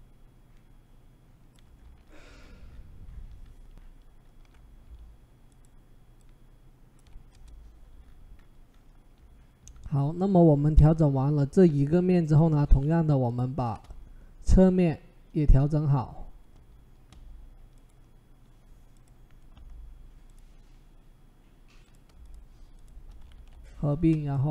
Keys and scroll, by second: 7.1 Return, 23.2 ctrl+e.